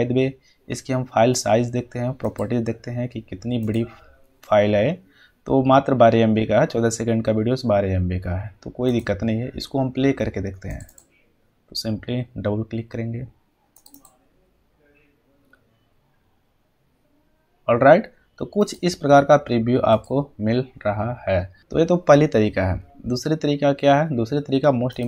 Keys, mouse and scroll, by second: 1.8 right click, 2.2 click, 8.8 click, 11.8 click, 13.7 click, 20.0 click, 24.9 click.